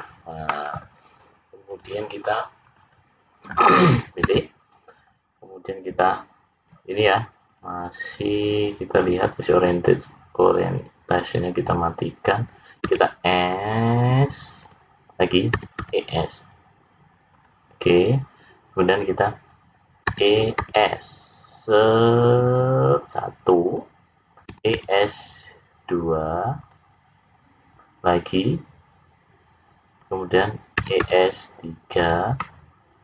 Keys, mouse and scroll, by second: 0.4 middle click, 1.7 click, 2.6 click, 2.9 click, 4.2 `, 7.4 click, 8.0 click, 12.8 s, 15.5 e, 20.0 e, 24.5 e, 30.8 e, 32.4 middle click.